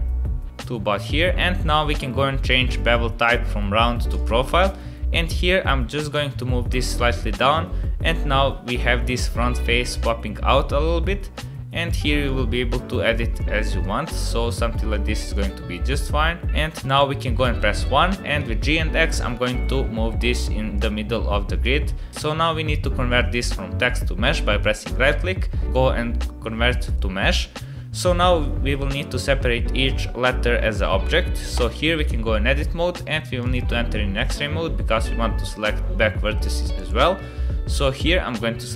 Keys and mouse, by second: 4.1 click, 6.1-7.3 drag, 8.3-8.7 middle drag, 9.7 middle click, 11.4 click, 12.4 click, 13.3 click, 14.6 click, 15.3 click, 16.8 KP_1, 17.6 shift+drag, 18.3 g, 24.6-26.9 drag, 31.6 Tab, 33.5 click, 34.1-36.3 middle drag, 36.7 KP_1, 37.9-38.7 drag.